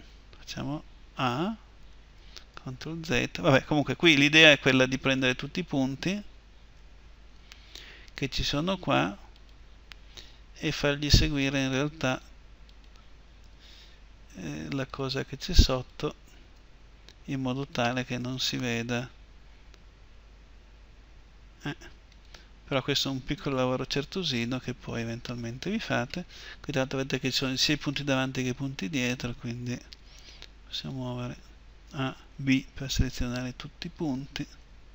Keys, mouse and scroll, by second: 1.0 a, 2.3 ctrl+z, 6.5 a, 9.1-11.1 right drag, 9.9 g, 13.2 g, 13.8 right click, 16.4 g, 16.8 right click, 19.5-21.8 right drag, 19.5 g, 23.5 g, 23.8 right click, 25.6 a, 29.7 g, 31.6 a, 31.9-33.9 drag, 34.4 b.